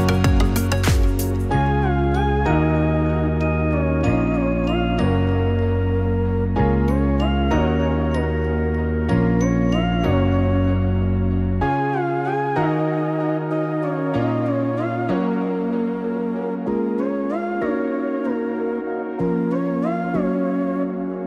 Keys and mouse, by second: 14.2 click, 16.8-20.5 drag.